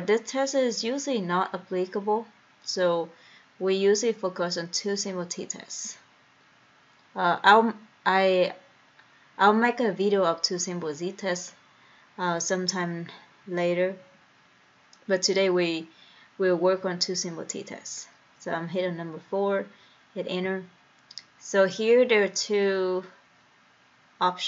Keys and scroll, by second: 20.7 Return.